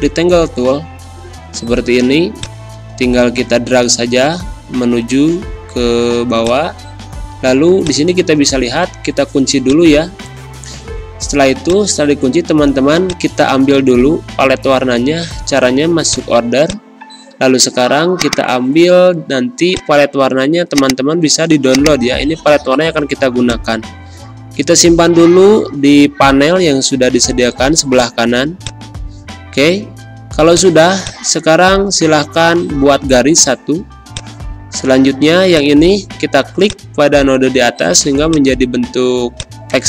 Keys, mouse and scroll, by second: 16.0-27.3 drag, 27.5 z, 27.9 click, 28.3 space, 28.5 click, 28.8 space, 30.5-32.7 drag, 32.7 v, 34.1-39.8 drag.